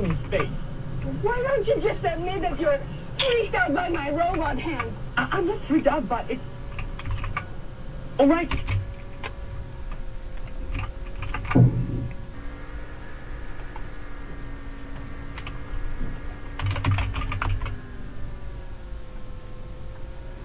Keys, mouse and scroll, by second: 4.4 super+Left, 7.1 super+Right, 8.5 space, 11.2 super+q, 13.6 click, 16.4-17.6 typing.